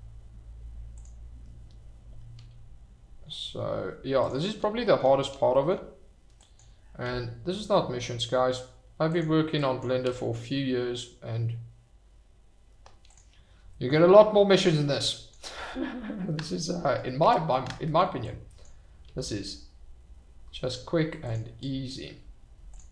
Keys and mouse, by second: 2.3 g, 4.2 click, 6.4 click, 7.0 g, 9.1 click, 9.6 click, 10.0 g, 13.1 click, 14.4 shift+middle click, 15.0 click, 15.5 g, 16.8 Escape, 17.2 Tab, 18.2 click, 19.0 g, 21.2 drag, 21.6 click, 22.1 g, 22.7 click.